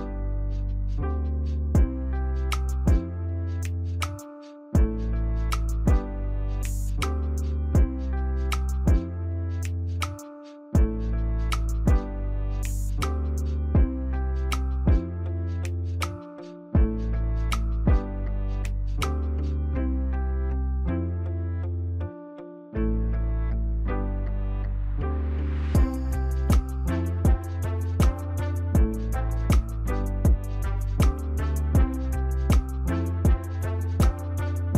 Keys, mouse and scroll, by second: 3.4 ctrl+j, 4.6 ctrl+click, 6.8 alt+click, 8.3 ctrl+j, 9.0 ctrl+click, 10.7 ctrl+j, 11.6 ctrl+click, 12.6 ctrl+t, 13.0 alt+click, 15.3 ctrl+j, 16.6 ctrl+t, 17.1 alt+click, 19.0 ctrl+j, 21.2 ctrl+t, 21.6 alt+click, 23.7 ctrl+j, 24.7 ctrl+t, 25.0 alt+click, 28.2 right click.